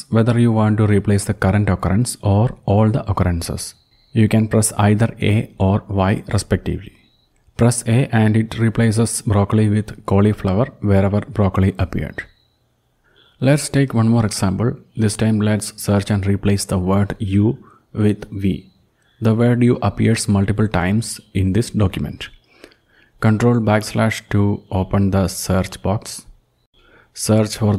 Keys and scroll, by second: 7.5 a, 25.9 ctrl+\, 27.1-27.7 typing.